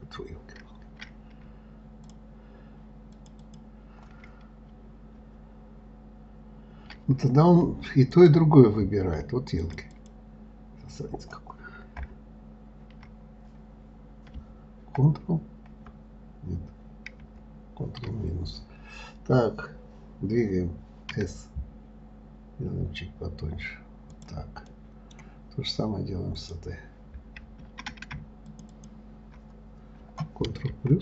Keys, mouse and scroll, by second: 2.4 shift+click, 3.5 shift+click, 3.8 shift+click, 8.5 click, 9.9 click, 10.3 click, 14.2 scroll down 2, 15.4 ctrl+KP_Add, 16.1 ctrl+KP_Add, 17.6 ctrl+KP_Subtract, 25.1-26.8 middle drag, 26.8 click, 28.9 shift+click, 29.1 shift+click.